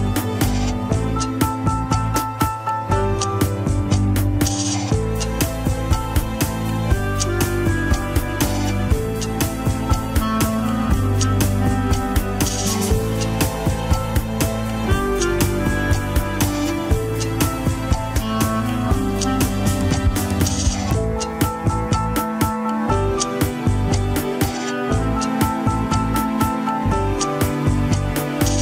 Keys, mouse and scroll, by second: 0.2 click, 0.4 g, 2.1 scroll down 1, 2.3 g, 4.4 scroll up 3, 4.6 shift+middle click, 5.0 click, 5.3 g, 6.5 scroll down 1, 6.8 click, 7.0 g, 8.4 scroll down 2, 8.6 shift+middle click, 9.1 click, 9.2 g, 10.3 shift+middle click, 10.7-11.2 scroll up 2, 11.2 click, 11.7 scroll down 3, 12.4 shift+click, 14.0 scroll up 4, 14.4 g, 15.5 click, 15.7 g, 16.4 scroll down 2, 17.5 scroll down 3, 18.3 click, 19.3 scroll up 2, 20.7 g, 22.4 scroll up 1, 22.9 click, 23.4 scroll down 3, 23.8 middle click, 24.7 KP_3, 24.8-25.5 scroll up 6, 25.2 shift+middle click, 25.8-26.8 scroll down 6, 27.1 shift+click, 27.7 shift+click, 28.3 shift+click.